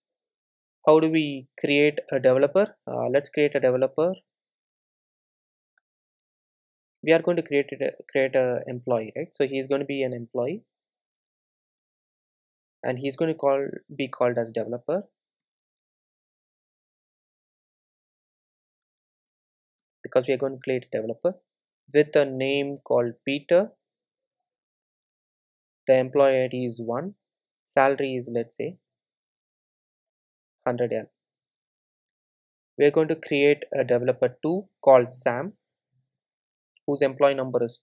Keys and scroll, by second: 11.8 Return, 17.6 Return, 18.0 super+z, 19.8 super+z, 19.9 Return, 32.1 super+d.